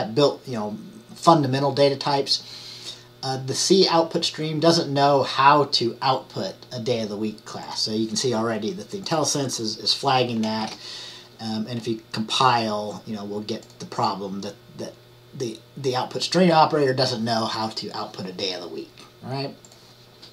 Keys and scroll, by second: 10.7 ctrl+shift+@.